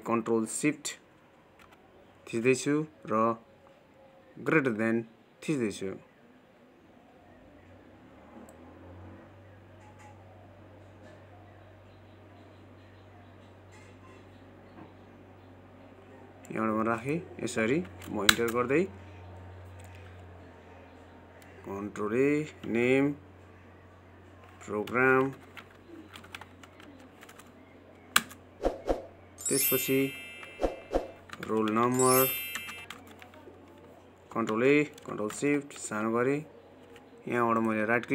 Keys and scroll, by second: 35.4 ctrl+a.